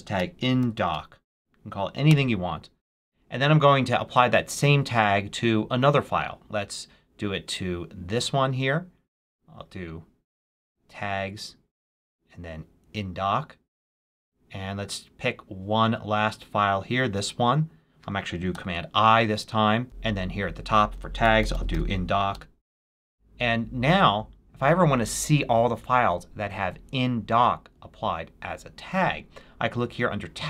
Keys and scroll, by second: 0.0-1.3 typing, 1.9 Return, 18.4 super+i, 20.9-22.1 typing, 22.2 Return.